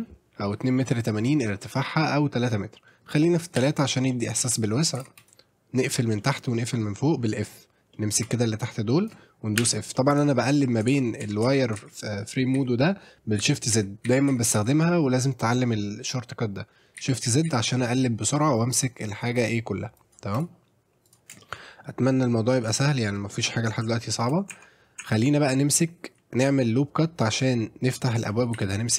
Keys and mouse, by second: 2.9 middle click, 4.1 middle click, 4.6 middle click, 5.0 shift+z, 5.2 click, 6.2 middle click, 7.9 middle click, 8.2 click, 10.5 middle click, 10.9-16.6 shift+z, 17.0 shift+z, 18.6 click, 20.0 click, 20.3 click, 21.1 click, 21.4 shift+middle click, 21.6 middle click, 23.4 middle click, 24.0 shift+middle click, 24.5 Tab, 25.0 Tab, 28.6 ctrl+r.